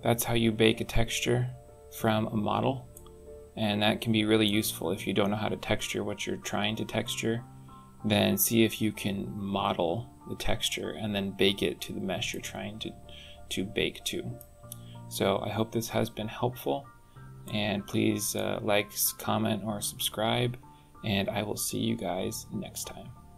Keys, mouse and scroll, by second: 0.2-0.8 scroll down 10, 2.7 middle click, 12.1 middle click, 14.5-15.2 scroll up 6, 15.5 scroll down 2, 17.2 shift+middle click.